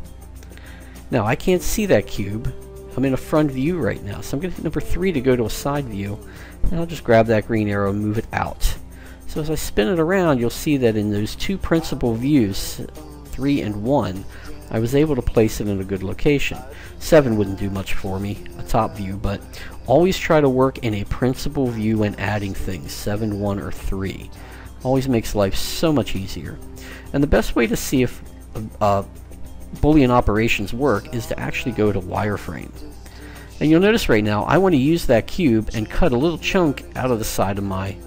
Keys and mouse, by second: 4.4 KP_3, 6.1-7.9 drag, 8.7-9.9 middle drag, 11.7-14.2 typing, 16.6 KP_7, 18.7 KP_1, 19.9-22.2 typing, 25.9-30.9 middle drag, 32.0-33.6 drag, 35.2-38.0 middle drag.